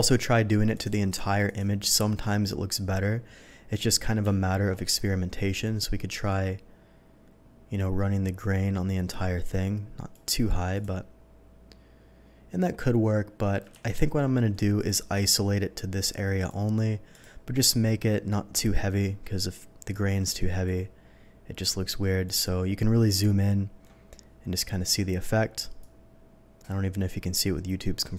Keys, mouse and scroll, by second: 0.7 click, 1.4 click, 5.8-10.1 alt+drag, 10.7 click, 13.8 ctrl+z, 14.6 ctrl+z, 14.7 ctrl+click, 16.4 ctrl+click, 17.1 ctrl+click, 20.6-22.2 drag, 23.2 middle click, 25.8-28.1 drag.